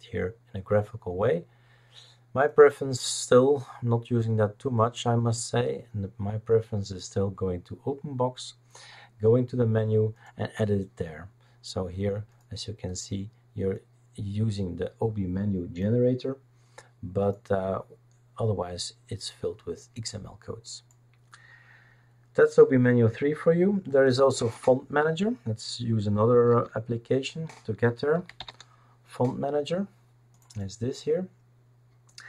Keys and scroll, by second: 26.5 alt+F3, 27.9-28.9 typing.